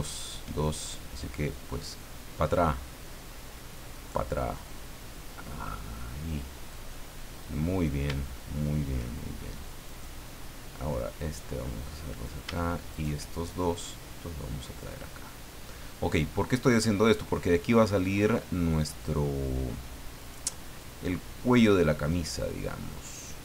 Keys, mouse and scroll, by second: 0.2 shift+right click, 0.9-2.7 shift+drag, 3.9 right click, 4.7-8.0 drag, 6.9-8.0 middle drag, 8.3 shift+middle click, 9.8 right click, 11.1-12.4 drag, 12.9 shift+right click, 13.4-15.0 shift+drag, 15.6 middle click, 16.0 scroll up 1, 20.2 right click, 20.8 click, 23.0 right click.